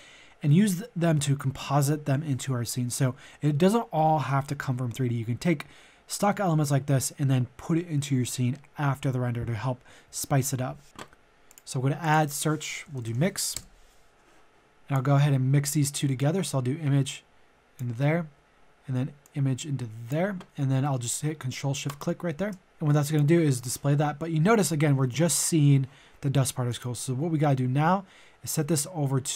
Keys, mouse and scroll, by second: 12.9 typing, 13.5 Return, 14.8 click, 15.1-16.1 scroll up 1, 16.1-17.9 drag, 17.9 scroll up 1, 19.2-20.6 drag, 21.8-29.3 ctrl+shift+drag.